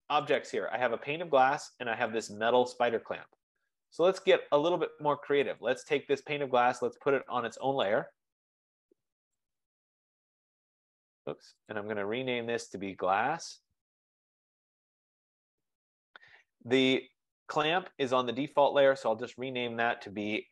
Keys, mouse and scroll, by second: 0.5 click, 2.4 click, 4.0 click, 5.7 click, 8.0 right click, 9.4 click, 10.7 click, 10.7 F15, 10.9 click, 11.8 click, 12.0 click, 13.3 click, 14.4-17.3 typing, 16.8 click, 18.4 click, 18.8 click, 20.3 click.